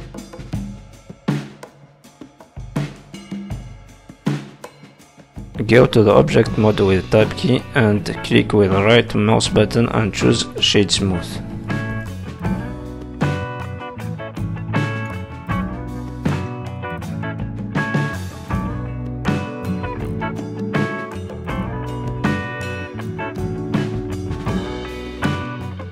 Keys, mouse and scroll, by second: 0.1 g, 1.7 middle click, 5.1 middle click, 5.1-5.5 scroll down 5, 5.9 shift+middle click, 6.1 middle click, 6.7 middle click, 7.7 Tab, 8.0-8.5 scroll down 2, 8.3 shift+middle click, 8.5 middle click, 9.1 right click, 9.9 middle click, 10.7-11.2 scroll up 7, 11.2 shift+middle click, 11.5 middle click, 12.1 middle click, 12.4 shift+middle click, 12.7 scroll up 2, 13.0 Tab, 13.2 middle click, 14.1 click, 14.5 g, 15.1 middle click, 17.0-17.6 scroll up 5, 17.6 middle click, 18.0 click, 18.7 shift+click, 19.6 shift+click, 20.1 shift+click, 20.7 click, 21.0 click, 22.0 ctrl+z, 22.6 click, 23.8 middle click, 25.1 scroll down 3, 25.3 middle click.